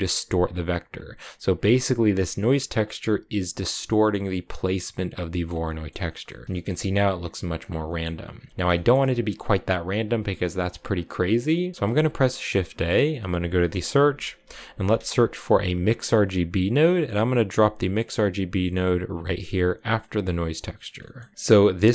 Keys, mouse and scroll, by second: 1.4 click, 2.6-4.4 drag, 5.1-7.5 middle drag, 7.5 scroll down 3, 7.7 middle click, 8.1-8.5 scroll down 2, 8.5-10.8 shift+middle drag, 10.8 click, 11.7 shift+a, 20.2 click, 20.8 middle click, 21.7 click.